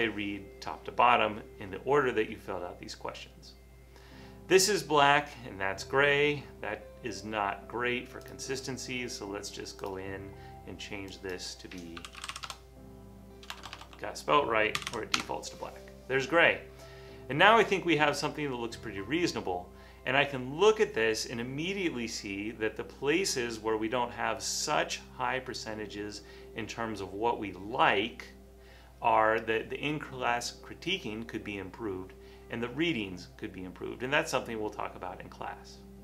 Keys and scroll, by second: 11.8-15.8 typing, 18.0-18.8 typing.